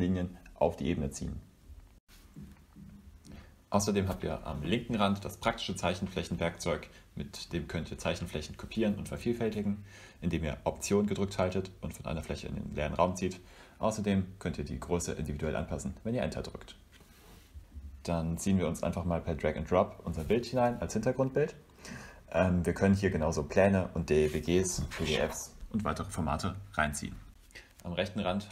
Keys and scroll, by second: 8.1 v, 12.2 shift+o, 13.3 BackSpace, 16.3 v.